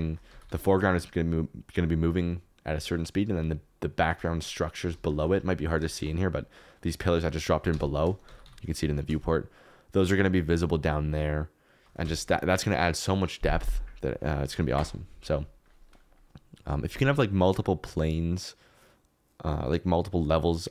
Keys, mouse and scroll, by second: 0.2 g, 0.4 y, 4.0 Escape, 5.1 shift+click, 7.6 KP_0, 8.2 g, 8.4 y, 12.0 Escape.